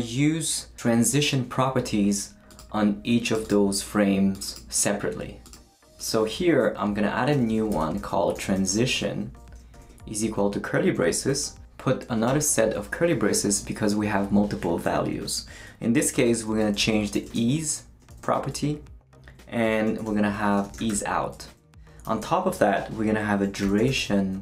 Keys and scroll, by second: 6.3-10.2 typing, 12.3 shift+[, 16.2-18.1 typing, 19.5-22.2 typing, 21.4 Right, 23.2-24.4 typing.